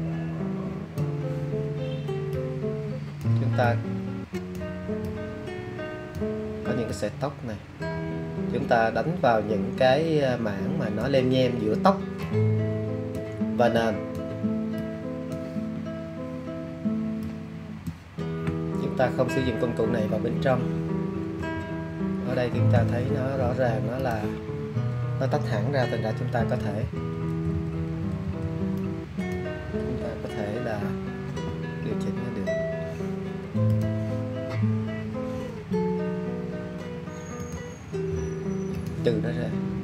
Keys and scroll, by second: 26.3 alt+], 27.2-28.2 typing, 31.2 z.